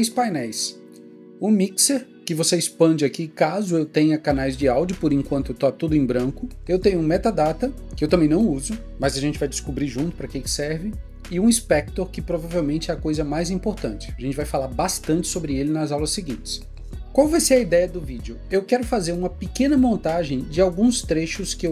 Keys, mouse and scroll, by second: 5.1 click.